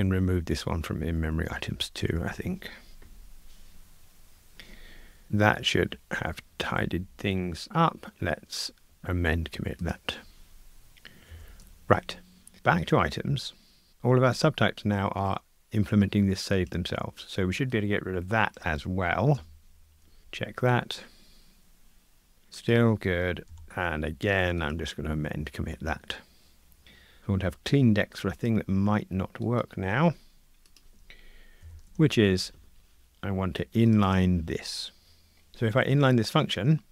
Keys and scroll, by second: 0.2 alt+Up, 2.9 ctrl+r, 6.1 super+k, 9.9 ctrl+alt+m, 11.3 shift+super+F12, 20.2 ctrl+r, 23.5 super+k, 24.7 ctrl+alt+m, 31.6 shift+super+F12.